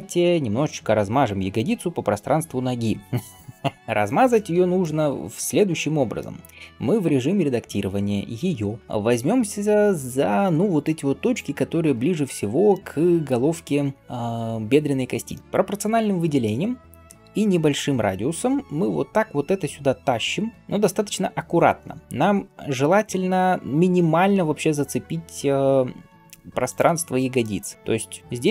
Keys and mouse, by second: 0.0 click, 0.0 middle click, 6.9 Tab, 8.0-8.9 drag, 8.0-8.8 middle drag, 10.0 click, 10.6 click, 17.1 g.